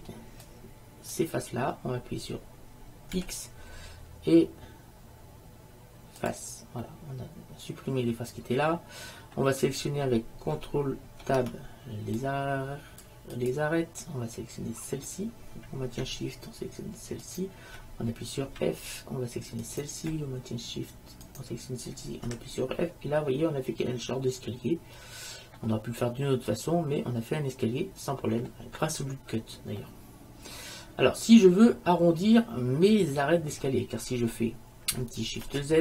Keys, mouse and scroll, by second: 0.0 b, 3.3 x, 7.0 middle click, 11.3 ctrl+Tab, 15.0-16.9 right drag, 17.4-19.0 right drag, 18.6 f, 19.8 click, 20.4-22.0 middle drag, 22.2 middle click, 22.4 f, 22.8 middle click, 23.9 middle click, 24.5-25.0 scroll down 1, 26.4 middle click, 26.6-28.2 middle drag, 29.9-31.3 middle drag, 31.9-34.2 middle drag, 35.7 shift+z.